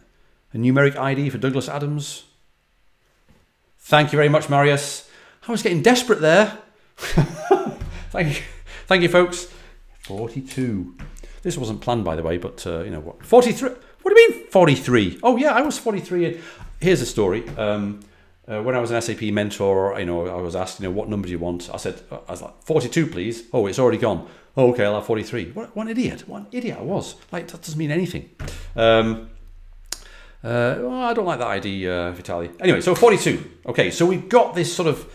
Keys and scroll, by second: 9.9 Left, 9.9 4, 10.4 2, 32.6-33.3 typing.